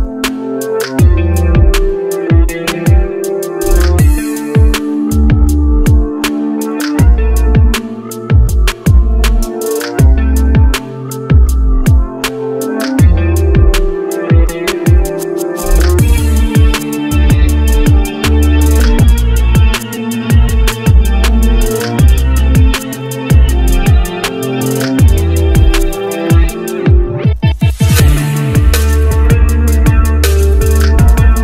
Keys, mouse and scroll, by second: 4.4-4.8 scroll down 1, 5.0-5.6 scroll up 1, 8.8 right click, 14.0-15.1 scroll up 1, 17.2-18.7 scroll down 1, 19.6 ctrl+right click, 26.1 Down, 26.2 Down, 26.5 Down, 26.8 Down, 27.0 Down, 27.4 Right, 27.7 Right, 28.5 Left.